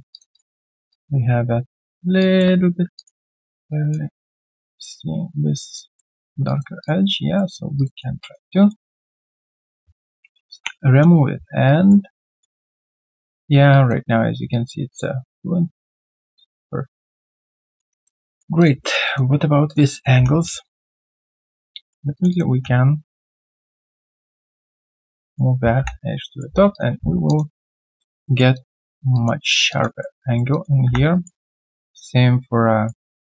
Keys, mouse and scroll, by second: 0.3 alt+click, 0.6 alt+middle click, 0.9 alt+click, 2.0 alt+click, 2.9 alt+click, 3.2 alt+middle click, 3.5 alt+right click, 3.7 alt+click, 6.4 alt+click, 7.1 alt+click, 7.1 right click, 7.4 q, 7.9 double click, 8.2 alt+click, 8.5 alt+middle click, 9.4 shift+click, 10.5 ctrl+Delete, 11.6 right click, 12.3 alt+click, 12.6 alt+middle click, 12.9 alt+click, 13.7 alt+click, 16.5 alt+middle click, 16.9 alt+click, 17.6 alt+middle click, 17.9 alt+click, 18.3 alt+middle click, 18.8 alt+right click, 19.0 alt+click, 19.6 alt+click, 19.9 alt+middle click, 20.2 1, 20.4 alt+right click, 20.6 alt+click, 21.0 alt+right click, 21.2 alt+click, 21.6 right click, 22.3 double click, 25.1 w, 25.3 alt+right click, 25.7 3, 26.1 right click, 26.4 q, 26.9 scroll down 1, 27.2 alt+click, 27.5 alt+middle click, 27.8 alt+click, 28.2 alt+middle click, 28.5 alt+click, 29.1 alt+click, 29.4 alt+middle click, 29.7 alt+click, 30.0 alt+middle click, 30.2 alt+right click, 30.5 alt+click, 31.1 alt+right click.